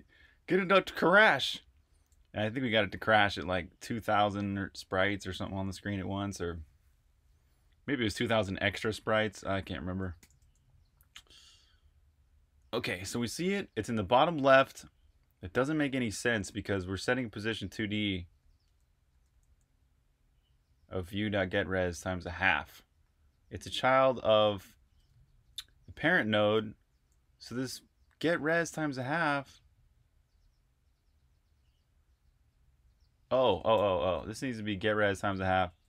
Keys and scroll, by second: 3.9-5.1 typing, 10.1-10.7 typing, 12.7 typing, 15.9 typing, 18.3-19.3 typing, 22.6-27.3 typing, 33.5-35.8 typing.